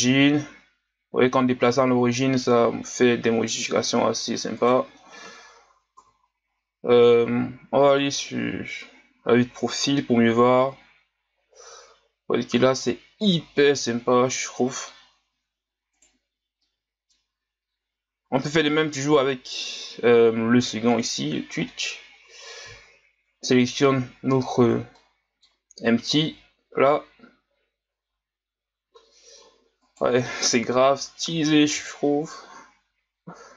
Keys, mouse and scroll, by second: 5.2 KP_1, 6.0 KP_3, 7.5 g, 16.4 scroll down 1, 16.6-19.0 middle drag, 19.0 right click, 20.9-21.3 drag, 21.3-21.7 scroll down 1, 21.7 middle click, 22.1-23.6 scroll up 1, 23.6 right click, 24.9-26.4 middle drag, 26.4 g, 30.6 KP_3, 31.8 g.